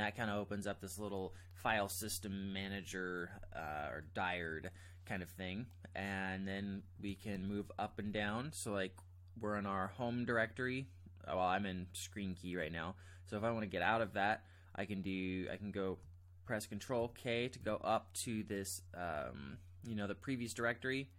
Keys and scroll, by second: 7.3 ctrl+j, 7.9 ctrl+j, 8.1 ctrl+j, 17.0 ctrl+k, 17.6 ctrl+k.